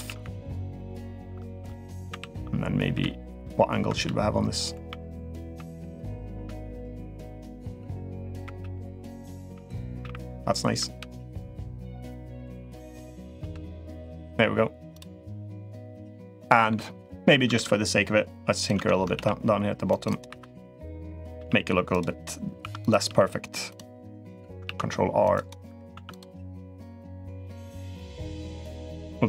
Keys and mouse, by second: 15.6-16.4 middle drag, 17.3 ctrl+r, 18.4 click, 18.5 Tab, 18.9 ctrl+r, 20.2 2, 20.7 click, 21.1 g, 22.5 1, 22.6 click, 22.8 g, 24.0 click, 24.4 ctrl+r, 25.7 1, 25.9 click, 26.6 click, 27.6 click, 28.3 click.